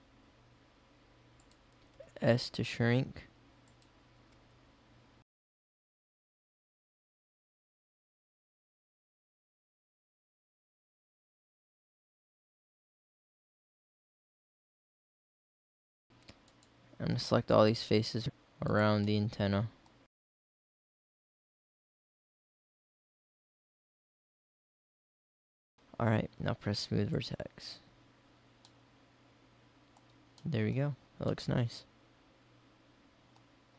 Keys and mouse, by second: 1.9 s, 4.2 KP_1, 6.5 e, 9.2-14.2 typing, 15.2 middle click, 15.3 click, 15.5 click, 15.9 middle click, 17.6-19.2 right drag, 19.3-21.8 middle drag, 21.8 ctrl+z, 22.1 middle click, 22.6 middle click, 23.8 middle click, 24.2 middle click, 28.8 middle click, 29.6 middle click, 31.1 middle click, 32.9-33.7 middle drag.